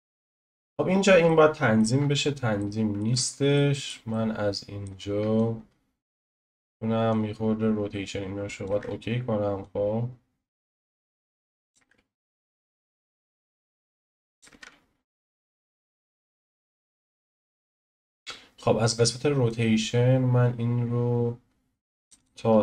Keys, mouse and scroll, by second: 5.5 click, 6.4 ctrl+z, 7.2-8.7 drag, 8.7 ctrl+z, 9.8-11.8 drag, 11.8 ctrl+z, 12.5-14.5 drag, 14.5 ctrl+z, 15.3-18.1 drag.